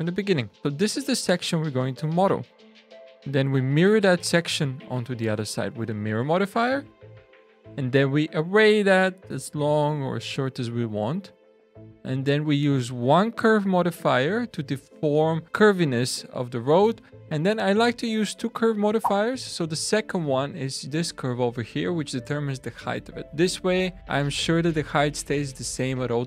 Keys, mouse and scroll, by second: 0.6 click, 0.6 h, 3.1 click, 7.4 click, 12.7 click, 18.9 click, 20.2 click.